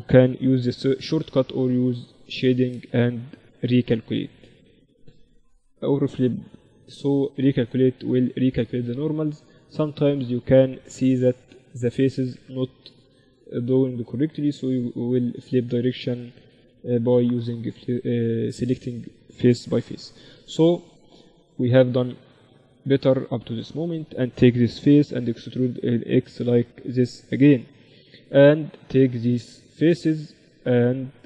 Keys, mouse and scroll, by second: 0.6 t, 2.2-11.8 drag, 9.2-21.1 right drag, 19.8 t, 20.8 a, 21.3 Tab, 21.6 middle click, 22.4 Tab, 23.3-25.1 drag, 25.1 e, 25.3 middle click, 29.1-31.0 right drag, 31.0-31.2 middle drag.